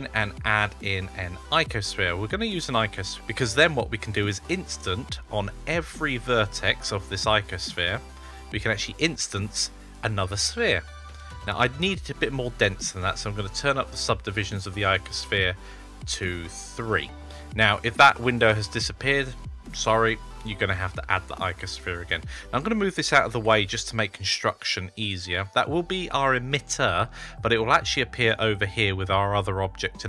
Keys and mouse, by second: 12.5 click, 16.7 click, 21.3 click, 23.2 g, 29.9 click.